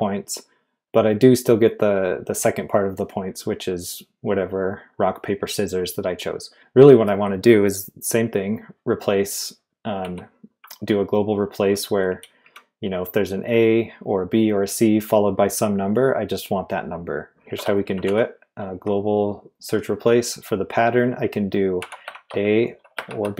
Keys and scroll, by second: 10.0 k, 12.1 j, 12.4 k, 17.1-18.5 typing, 21.8-23.3 typing.